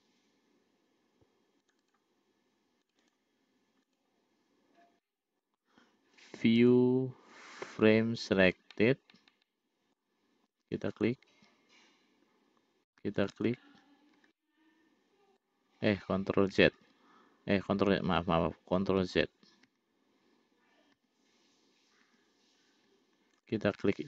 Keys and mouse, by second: 2.0 click, 3.2 click, 4.2 click, 5.5 middle click, 7.0-8.2 drag, 9.2-10.4 middle drag, 11.2 click, 13.5 shift+click, 14.8-15.9 middle drag, 17.3 ctrl+x, 19.7 ctrl+z, 23.7 click.